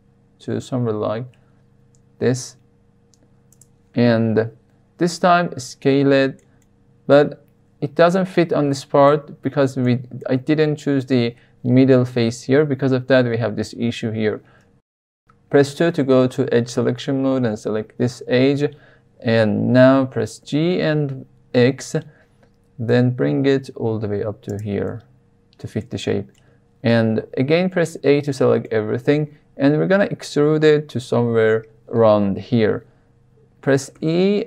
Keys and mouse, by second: 3.5 click, 5.0-6.4 middle drag, 6.6 middle click, 8.8 shift+middle click, 9.8-10.1 middle drag, 14.5 2, 17.2 click, 20.3 g, 20.6 y, 21.5 x, 24.4 click, 24.8-25.8 middle drag, 26.3-26.9 middle drag, 27.6 a, 28.2 shift+middle click, 33.9 e.